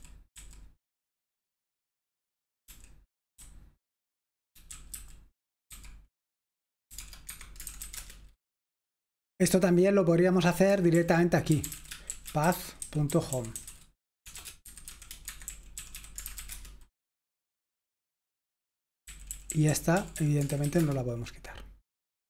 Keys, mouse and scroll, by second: 0.0-0.3 typing, 2.5-5.7 typing, 7.0-7.9 typing, 7.2 Escape, 10.5-16.5 typing, 16.5 Return, 19.1-20.8 typing.